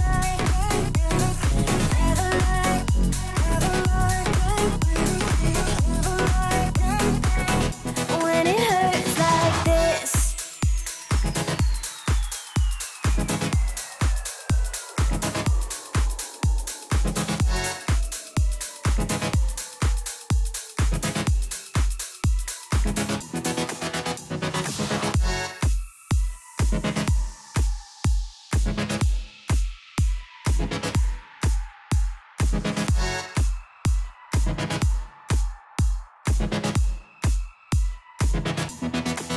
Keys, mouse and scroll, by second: 1.9 click, 6.8-7.4 alt+scroll down 1, 7.5 click, 8.0-8.7 alt+scroll up 1, 9.5-11.4 drag, 14.8 click, 18.8 click, 19.3 alt+scroll up 1, 24.2 alt+Num_Lock, 24.2 alt+scroll up 1, 24.5-25.3 alt+scroll down 2, 25.3-25.8 alt+scroll up 2, 26.3-27.3 drag, 29.6 alt+scroll up 1, 30.6-34.9 drag, 34.9 right click, 37.2 click.